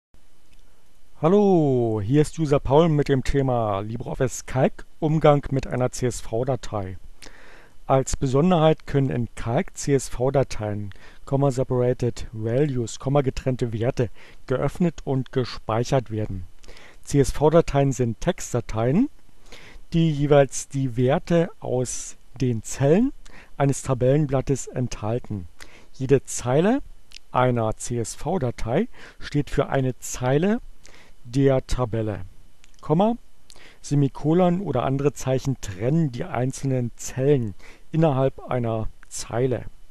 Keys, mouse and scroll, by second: 0.0 click, 0.3-1.3 drag.